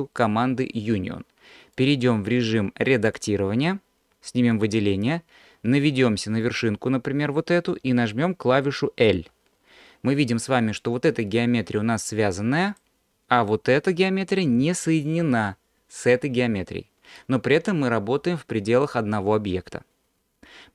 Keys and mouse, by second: 1.9-3.2 drag, 4.6-9.3 drag, 9.3 l, 12.7 click, 15.2 l.